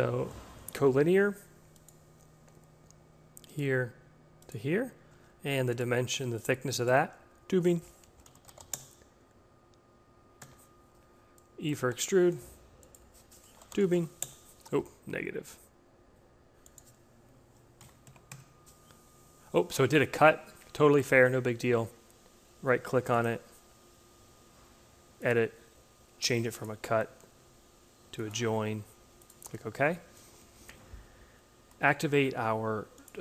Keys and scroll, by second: 4.5 d, 7.6-8.9 typing, 11.8 e, 13.1-14.3 typing, 17.7 Home, 18.2 Return.